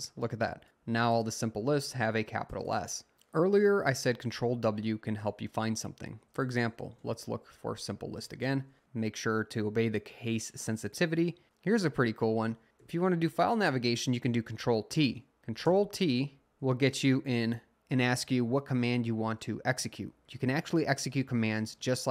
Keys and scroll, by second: 4.4 w, 6.2-8.9 typing, 10.9 Return, 12.7 Up, 12.8 t, 15.7 t.